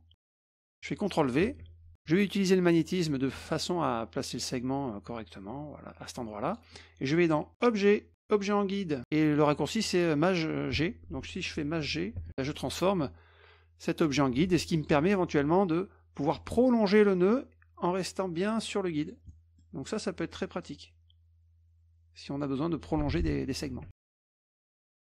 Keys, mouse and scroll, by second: 1.5 ctrl+v, 2.9 click, 4.5-6.5 drag, 7.5 click, 12.2 shift+g, 12.3 middle click, 14.1 F2, 14.7 click, 16.4-19.1 drag, 19.3 middle click, 20.6-22.4 drag, 23.1 click, 23.4 middle click, 23.8 ctrl+z, 24.2 ctrl+z, 24.6 middle click.